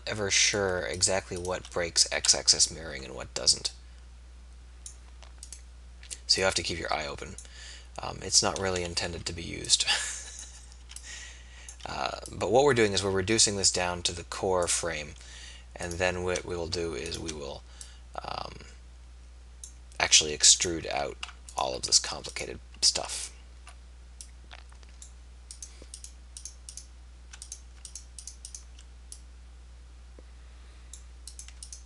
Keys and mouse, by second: 1.8 middle click, 2.4 KP_3, 8.8 a, 9.2 b, 10.8 b, 12.2 b, 21.0 a.